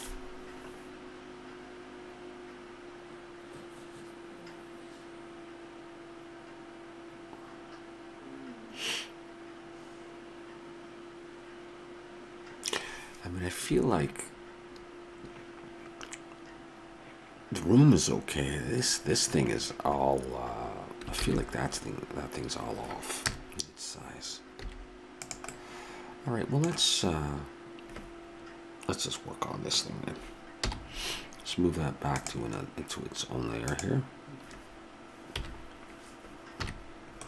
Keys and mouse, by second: 21.2 shift+z, 23.2 KP_0, 24.7 s, 25.9 middle click, 30.7 m, 35.4 KP_1, 36.6 KP_3.